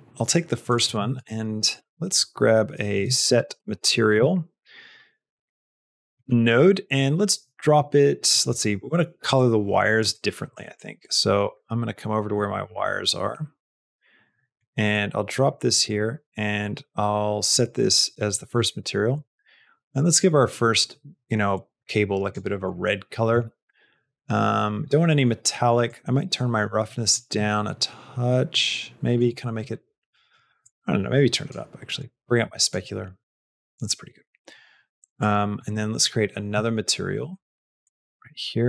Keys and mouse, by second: 0.7 click, 1.0 shift+a, 5.5 middle click, 6.6 middle click, 8.3 middle click, 9.2 click, 10.1 middle click, 10.7 click, 11.4 middle click, 12.7 click, 13.5 middle click, 14.8 click, 15.9-17.9 drag, 25.9-29.1 drag, 30.6 click, 31.9 click, 35.1 click, 37.7 click.